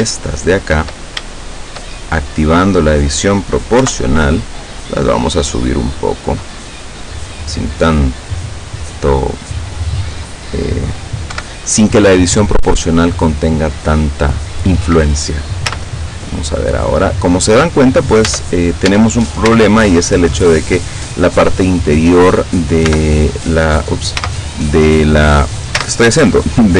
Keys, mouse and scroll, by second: 0.1 shift+right click, 0.6 shift+right click, 1.6 shift+right click, 2.0-3.2 shift+middle drag, 3.8 o, 5.0-6.2 drag, 6.2-6.9 scroll up 2, 7.8-8.1 scroll up 2, 9.8-11.0 middle drag, 11.4 KP_7, 15.7 z, 18.3 Caps_Lock, 19.5 z, 22.9 l, 24.2 z, 25.8 z.